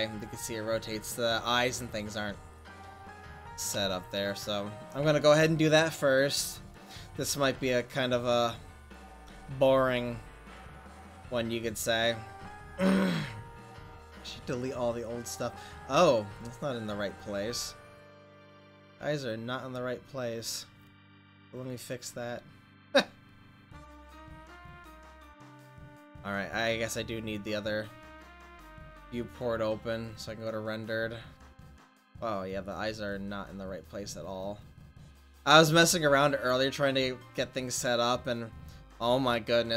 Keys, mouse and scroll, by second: 2.6 middle click, 3.9 Tab, 5.1 Tab, 5.1-7.4 drag, 7.4 ctrl+s, 8.3-10.6 drag, 14.3 middle click, 15.3 middle click, 15.5 middle click, 16.1-16.5 middle drag, 18.2 middle click, 19.8-22.4 middle drag, 22.4-26.0 drag, 27.3 click, 28.0 click, 28.1-29.4 middle drag, 31.1 click, 33.0 click, 33.7 click, 36.7 click, 36.8 right click, 37.7 click, 37.7 right click, 38.4 click, 38.4 middle click, 38.4 right click.